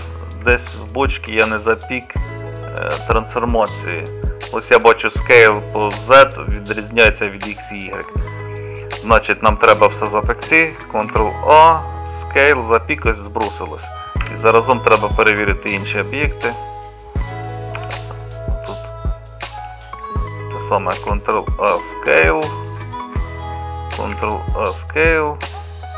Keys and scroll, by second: 0.0 n, 11.2 ctrl+a, 14.3 KP_Divide, 17.8 g, 21.1 ctrl+a.